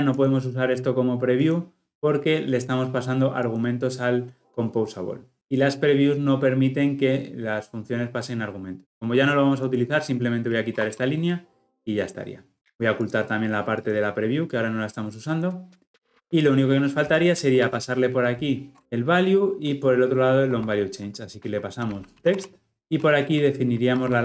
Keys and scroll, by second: 10.7 ctrl+x, 18.2 ctrl+o, 18.8 ctrl+p, 20.4 Escape, 22.7 ctrl+z.